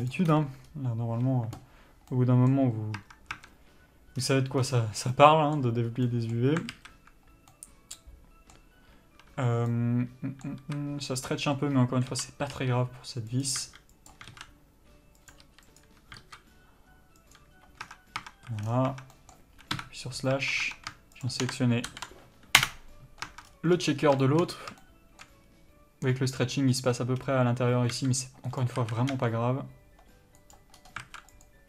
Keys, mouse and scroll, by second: 0.4 u, 2.4 middle click, 3.3 Tab, 5.4 middle click, 6.2 scroll up 1, 6.3 middle click, 7.0 alt+a, 7.8 middle click, 10.9 a, 12.4 l, 12.8 r, 13.9 s, 15.8 r, 16.5 s, 18.1 scroll down 1, 18.2 Tab, 18.8 a, 18.9 scroll down 1, 19.2 Tab, 19.4 middle click, 20.0 KP_Divide, 20.6 Tab, 21.5 shift+click, 22.9 ctrl+l, 23.6 Tab, 23.8 scroll up 1, 24.2 scroll down 1, 24.5 shift+middle click, 24.8 scroll up 1, 25.1 shift+middle click, 25.8-27.5 scroll up 1, 27.5 scroll down 1, 28.3 s, 29.1 a, 29.5 s, 31.3 alt+a.